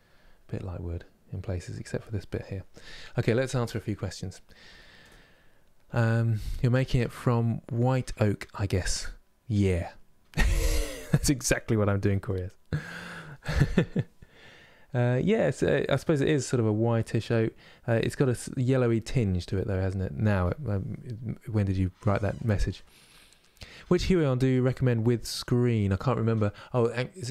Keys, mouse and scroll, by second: 15.2-15.6 scroll down 1, 15.6-27.3 middle drag.